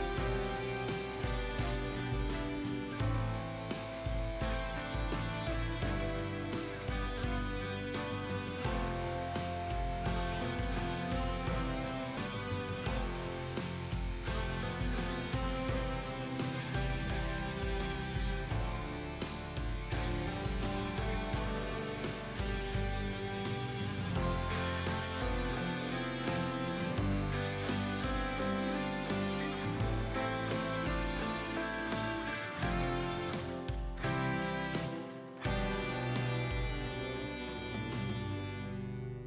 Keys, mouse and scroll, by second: 0.3-0.9 scroll up 1, 0.9 click, 1.2 scroll down 1, 2.0 click, 3.1-3.5 scroll down 1, 3.5-4.2 scroll up 1, 4.2-6.9 drag, 7.1-7.8 scroll up 1, 7.8 click, 8.0-8.5 scroll down 1, 8.5 scroll up 1, 8.8 click, 9.8 shift+Down, 10.2 ctrl+z, 10.4 click, 11.5-11.9 scroll up 1, 11.9 click, 13.4-15.0 typing, 17.1-17.5 scroll down 1, 18.2 ctrl+space, 18.3 ctrl+space, 18.7 scroll down 1, 19.2 shift+click, 24.5 scroll up 1, 25.2 click, 25.8-26.1 scroll down 1, 26.1 click, 34.7-35.8 scroll up 1, 35.8 click, 37.6 click, 38.6 scroll down 1, 38.9 click.